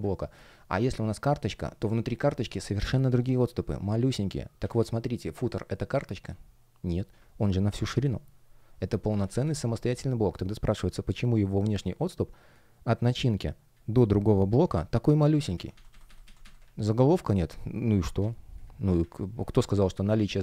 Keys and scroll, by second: 0.2 space, 2.4 super+z, 7.3 shift+p, 9.1 super+z, 10.1 alt+shift+l, 15.4 super+z.